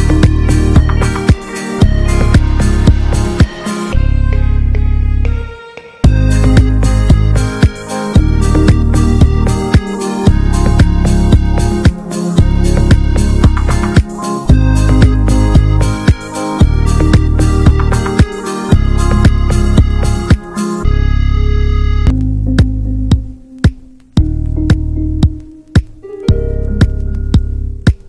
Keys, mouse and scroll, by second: 0.5 click, 1.6 n, 2.4 click, 3.0 click, 3.2-4.0 scroll up 3, 4.0 click, 4.6 click, 7.2 click, 8.0 click, 9.6-13.4 drag, 13.4 scroll down 4, 13.5-14.2 middle drag, 14.2 shift+a, 17.4 alt+middle click, 17.8 alt+middle click, 18.9-19.7 drag, 19.7-20.2 scroll down 1, 20.2 g, 22.4-22.8 middle drag, 22.8-23.5 scroll up 3, 23.5-24.6 scroll down 1, 24.6-25.0 scroll down 1, 25.3 click, 25.6 KP_0.